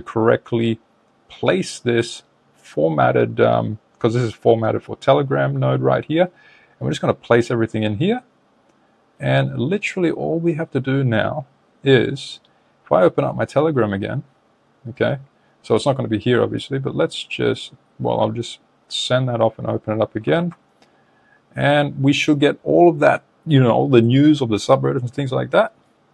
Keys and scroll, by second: 20.3 super+Tab.